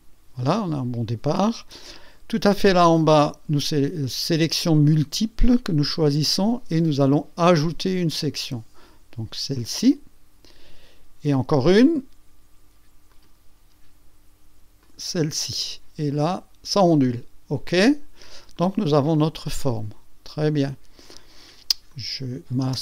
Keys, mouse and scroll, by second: 3.0 click, 4.5 click, 4.8 click, 5.1 click, 8.0 click, 9.6 click, 13.1 click, 14.8 click, 15.6-17.0 drag, 17.7 click, 18.5-19.8 drag, 19.9 click, 21.1 click, 21.9 click, 22.6 space.